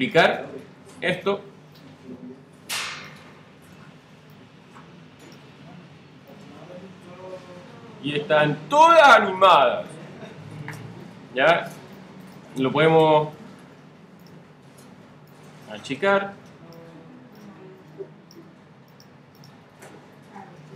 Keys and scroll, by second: 0.7 super+d, 3.8 shift+super+d, 4.5 shift+super+d.